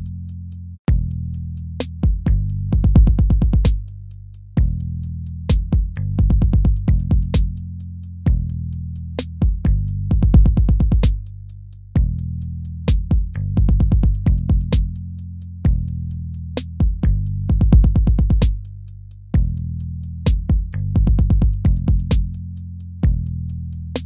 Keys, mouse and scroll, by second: 6.1 ctrl+z, 20.2 ctrl+c, 22.3 ctrl+v.